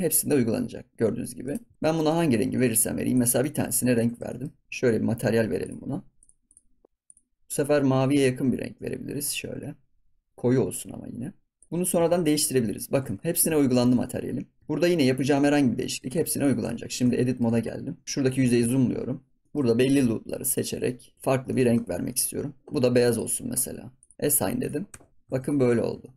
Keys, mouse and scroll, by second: 1.7 ctrl+s, 1.7 shift+middle click, 2.2 scroll up 2, 2.5 shift+middle click, 3.1 click, 3.4 shift+middle click, 3.9 Tab, 4.2 shift+middle click, 4.6 Tab, 5.6 click, 6.1 click, 6.4 click, 6.8 ctrl+s, 7.0 click, 11.7 middle click, 12.0 ctrl+s, 12.1 middle click, 13.0 ctrl+s, 13.1 middle click, 13.8 ctrl+s, 14.0 middle click, 14.6 scroll up 1, 14.6 middle click, 15.5 scroll down 1, 15.7 shift+middle click, 16.1 ctrl+s, 16.4 click, 16.6 Tab, 16.8 scroll up 1, 17.0 shift+middle click, 17.5 ctrl+s, 18.0 click, 18.5 KP_Decimal, 19.2 scroll down 4, 19.4 shift+middle click, 19.6 scroll up 1, 20.5 alt+shift+click, 20.8 middle click, 21.1 alt+shift+click, 21.2 scroll down 3, 21.5 middle click, 21.7 ctrl+s, 21.8 scroll down 1, 22.0 middle click, 22.3 scroll up 1, 23.1-24.1 drag, 24.5 click, 24.9 Tab, 25.0 scroll down 3, 25.2 ctrl+s, 25.3 click, 25.7 scroll up 3, 26.0 shift+middle drag.